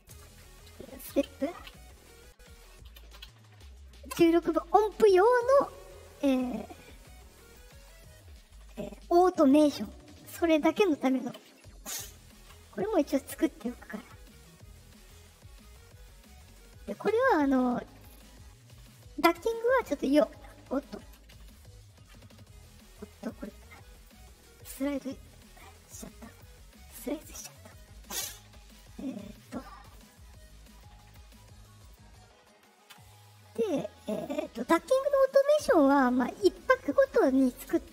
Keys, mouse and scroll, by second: 0.1-1.6 typing, 2.8 BackSpace, 6.6 middle click, 6.6 scroll down 2, 7.4 click, 9.0 click, 10.6 click, 12.3 Return, 13.5 middle click, 14.2 middle click, 15.1 middle click, 16.2 middle click, 23.1 right click, 23.9 right click, 24.3 right click, 25.2 right click, 25.8 click, 26.2 click, 27.1 click, 28.6 click, 29.1 scroll down 2, 29.8 click, 30.7 click, 31.8 click, 34.1 right click.